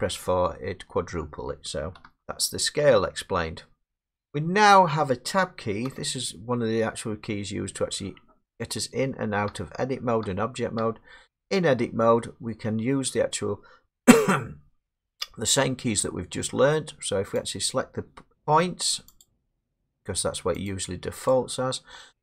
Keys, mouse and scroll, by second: 0.5 middle click, 0.5 middle click, 0.6 middle click, 2.2 ctrl+z, 2.9 middle click, 3.0 middle click, 5.0 middle click, 5.9 Tab, 7.6 middle click, 9.0 Tab, 9.5 Tab, 10.2 Tab, 10.8 Tab, 12.9 middle click, 17.5 click, 18.4 click, 19.2 click, 19.9 click, 20.7 click, 21.3 click.